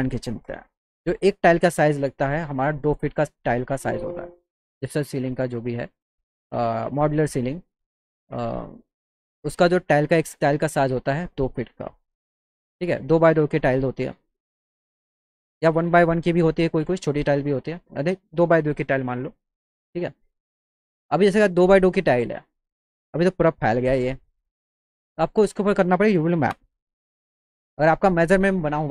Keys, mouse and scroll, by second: 0.8 click, 2.8 click, 3.1 click, 3.9 click, 4.1 click, 5.4 click, 9.0 click, 9.3 click, 10.2 click, 11.6 click, 13.2 click, 15.4 click, 16.9-17.6 drag, 24.8 click, 25.3 click, 26.6 u, 27.7 click.